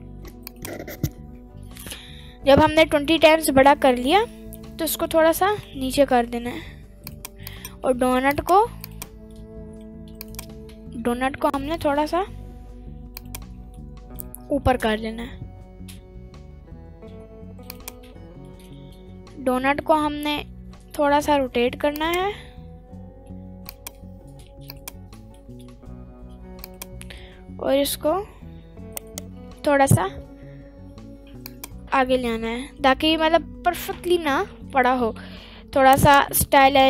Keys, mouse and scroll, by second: 0.5 click, 1.6-2.5 scroll up 2, 2.5 middle click, 3.2 middle click, 4.3 middle click, 4.3 scroll up 1, 4.7 g, 5.6 Down, 5.6 z, 6.5 Up, 7.4 click, 8.3 click, 8.8 click, 9.4 middle click, 10.1 shift+click, 11.5 g, 13.6 click, 13.7 scroll up 1, 13.8 middle click, 14.2-14.6 scroll down 1, 14.6 g, 15.4 z, 18.0 click, 18.0-18.4 scroll down 1, 18.4 middle click, 19.1 r, 20.3 right click, 20.5 r, 21.4 x, 22.3 click, 23.6 click, 24.7 click, 25.1 middle drag, 25.7 r, 26.4 x, 26.9 click, 27.1 g, 28.2 x, 29.3 right click, 29.5 g, 30.1 y, 31.9 middle click, 31.9 click, 33.0 scroll up 1, 33.2 middle click, 34.9 g, 36.4 right click, 36.7 g.